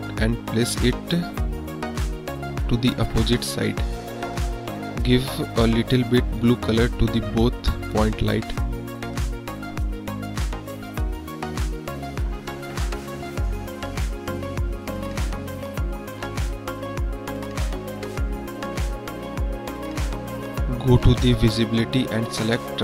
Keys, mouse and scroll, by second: 0.9-1.4 drag, 1.6 drag, 3.6-4.0 middle drag, 4.5 middle drag, 7.1 click, 12.2 click, 17.6 KP_1, 18.2 KP_1, 18.7-19.1 drag, 21.2 click, 22.0 click.